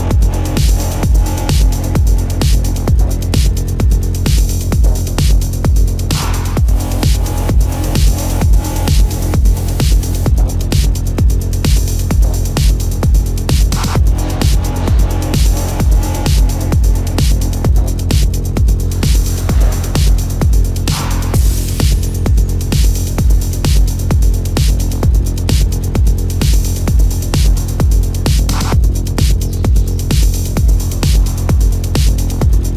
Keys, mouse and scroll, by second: 3.5 space, 10.2 ctrl+alt+z, 11.0 space, 12.2 ctrl+=, 17.0 ctrl+=, 20.3 ctrl+=, 20.4 space, 23.3 ctrl+alt+z, 23.8 ctrl+alt+z, 24.3 ctrl+alt+z, 25.1 space, 27.0 space, 30.0 ctrl+alt+z.